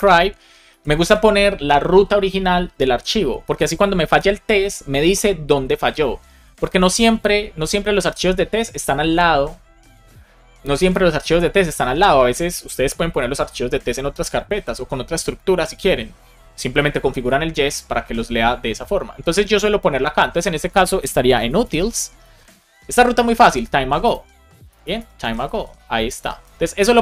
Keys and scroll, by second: 0.6 Left, 0.9 space, 22.0 space, 22.6 space, 24.6 BackSpace, 25.2 shift+a, 26.0 BackSpace, 26.7 space.